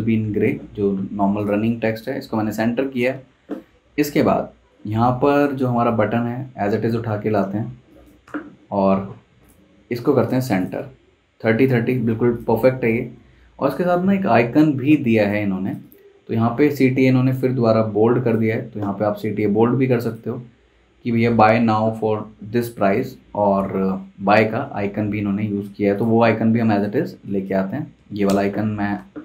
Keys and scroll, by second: 7.6 z, 8.2 v, 16.4 Escape, 23.2 Escape, 28.0 super+c, 28.2 super+Tab, 29.0 super+v.